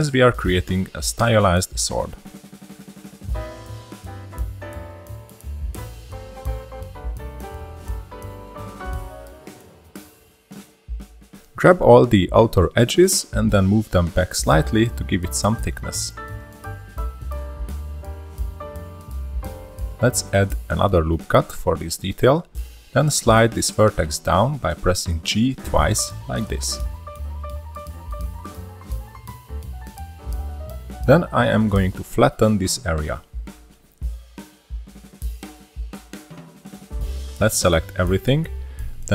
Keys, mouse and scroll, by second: 0.1 middle click, 0.6 ctrl+r, 2.9 middle drag, 3.1-3.5 scroll up 2, 3.3 click, 3.5-3.9 middle drag, 5.5 scroll down 1, 5.6 2, 5.8-6.1 drag, 7.1 scroll down 2, 7.2 middle click, 7.4 ctrl+r, 9.0 1, 9.1 drag, 9.2-9.6 scroll up 1, 9.6 click, 10.9 scroll down 1, 11.1 middle drag, 11.3 2, 11.4 click, 11.7 middle click, 11.8-12.2 scroll up 1, 12.2 shift+click, 12.4 middle click, 12.7 shift+click, 13.0 scroll down 2, 13.2-16.7 middle drag, 16.7 click, 20.2 ctrl+r, 23.7 middle click, 24.1 1, 24.4 click, 25.9 g, 29.5-29.9 scroll down 1, 29.9-31.5 shift+middle drag, 31.5 click, 31.8 scroll up 3, 32.0-34.1 middle drag, 34.1-34.8 scroll up 2, 34.8 click, 37.3-38.2 scroll up 3, 38.2 click.